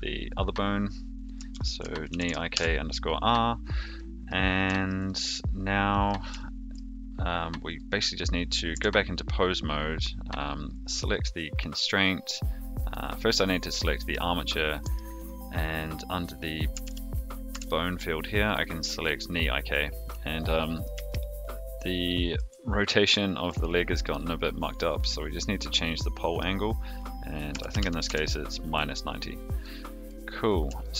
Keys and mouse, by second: 1.4-3.0 ctrl+drag, 3.9 middle click, 4.7 shift+middle click, 5.0 middle click, 5.9 middle click, 6.3 shift+middle click, 7.7 click, 8.7 Tab, 12.9-14.1 drag, 15.0-18.3 drag, 20.0-20.8 middle drag, 21.0-22.3 shift+middle drag, 23.2 shift+middle drag, 23.7-24.0 middle drag, 25.6 click, 26.6-28.7 drag, 29.6-30.0 middle drag, 30.8-30.9 shift+middle drag.